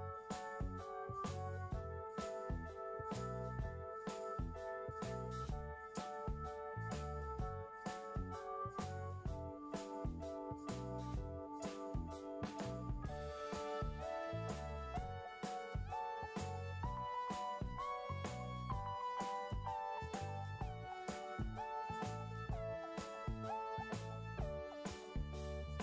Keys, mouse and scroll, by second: 25.6-25.8 typing.